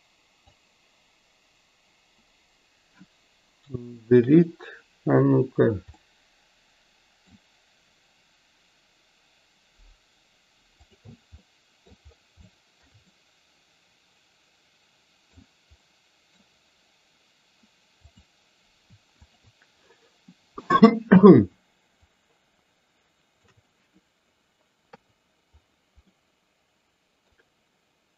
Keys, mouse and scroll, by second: 6.0-7.4 middle drag, 10.9 click, 11.5 middle click, 12.5-12.9 shift+middle drag, 13.1-15.4 middle drag, 15.9 middle click, 22.3-23.7 shift+drag, 26.1-27.4 middle drag.